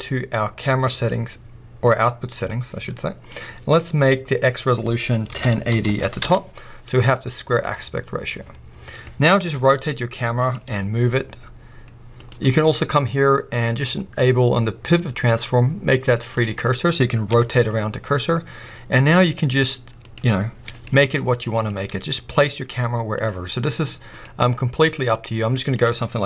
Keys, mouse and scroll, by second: 0.9 click, 2.4 click, 3.3-10.5 drag, 6.3 Return, 7.2-8.8 scroll down 2, 8.8-9.3 scroll down 1, 9.3 r, 10.7 g, 12.3 click, 12.9-20.1 drag, 20.6 g, 21.6 click, 21.9 g, 23.2 click, 24.1-25.9 drag.